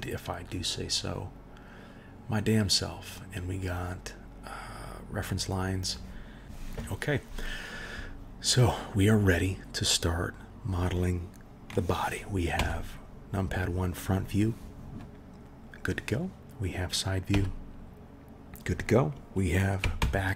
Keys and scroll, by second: 12.5 KP_1, 17.3 KP_3, 20.0 ctrl+KP_1.